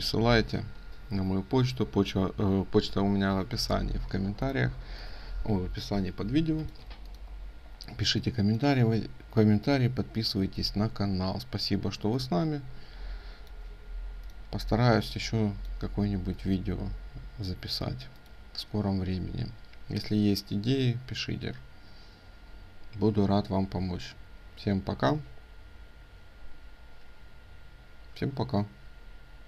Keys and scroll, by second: 6.3 ctrl+space.